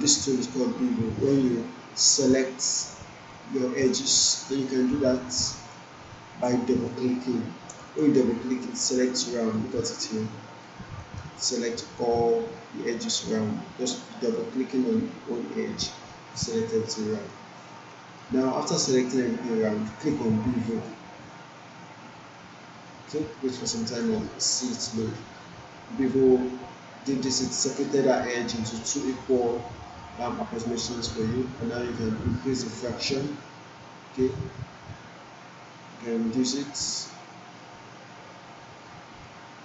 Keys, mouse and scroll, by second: 3.2 click, 9.1-10.3 alt+drag, 10.6-12.2 alt+right click, 11.3 alt+middle click, 11.5 alt+right click, 12.3-13.5 alt+drag, 14.2 click, 16.9-17.5 alt+middle click, 17.9 alt+middle click, 20.7 click, 22.9-23.5 alt+middle drag, 24.3-24.9 alt+middle drag, 32.7-39.3 drag.